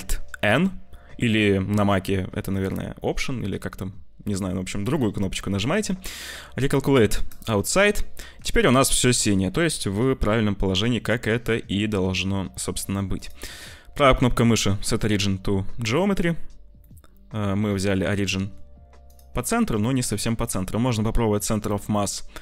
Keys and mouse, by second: 0.4 alt+n, 7.8-8.9 middle drag, 8.9 Tab, 10.0-12.6 middle drag, 16.7-18.5 middle drag, 19.1-22.4 drag.